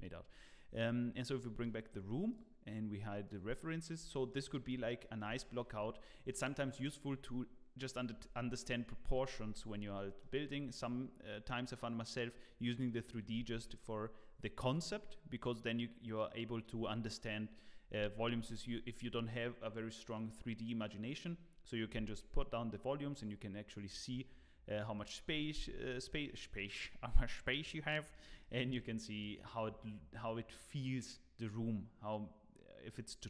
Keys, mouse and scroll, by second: 1.3 click, 1.6 scroll down 3, 1.9 middle click, 2.3 click, 3.2 click, 3.6 middle click, 3.9 click, 4.3 middle click, 4.6 scroll up 4, 5.0 middle click, 5.4 shift+middle click, 5.7 scroll up 1, 6.1 scroll down 1, 9.5 middle click, 22.3 scroll down 2, 22.7 middle click, 23.8-24.3 scroll up 3, 24.1 middle click, 25.9 middle click, 27.9 middle click, 28.4 shift+middle click, 28.8 middle click, 29.6 scroll down 2, 30.1-30.9 scroll up 1.